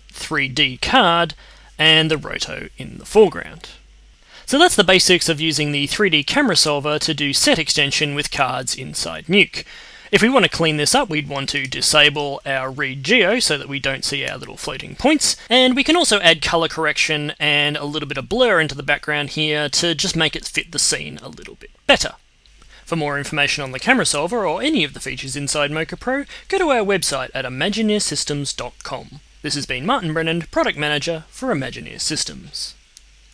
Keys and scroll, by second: 14.0 d.